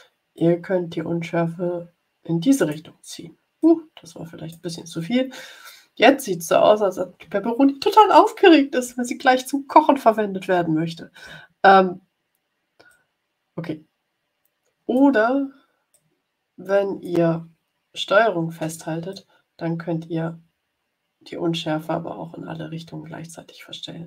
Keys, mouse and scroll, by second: 0.3-2.8 drag, 3.5-4.6 drag, 12.8-15.1 drag, 15.8-17.3 drag, 19.0-24.0 ctrl+drag.